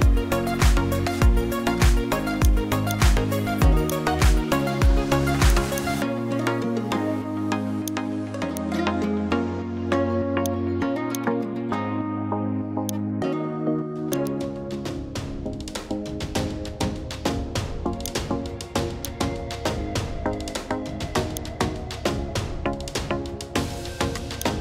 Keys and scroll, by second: 15.0-16.9 typing.